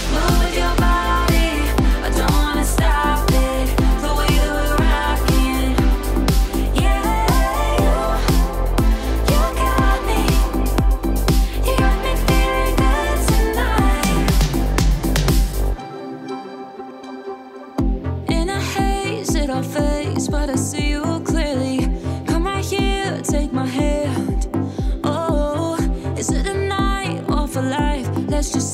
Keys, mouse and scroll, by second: 0.7-1.4 middle drag, 2.1 click, 4.7 scroll up 1, 8.7-9.7 click, 9.6-10.1 scroll down 1, 10.1-10.7 middle drag, 11.8 click, 12.4-13.1 middle drag, 14.2-17.3 drag, 25.1-25.7 middle drag, 26.4-28.2 drag.